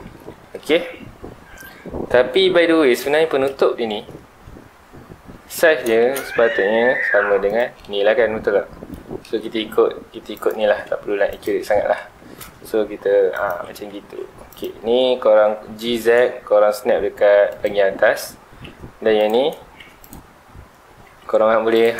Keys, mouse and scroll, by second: 0.2-3.2 middle drag, 3.8 scroll up 1, 5.8 s, 7.6 click, 7.8-9.3 middle drag, 9.3 s, 10.5 shift+click, 10.9 2, 11.3 alt+click, 12.1 g, 13.5 ctrl+click, 13.9 g, 14.6 click, 14.8 scroll up 1, 15.4 g, 17.6 ctrl+click, 17.8 middle click, 17.8 scroll down 1, 18.2-19.2 scroll up 1, 19.2 alt+click, 20.0 alt+click, 20.4 scroll down 1, 21.2 Tab, 21.7 click.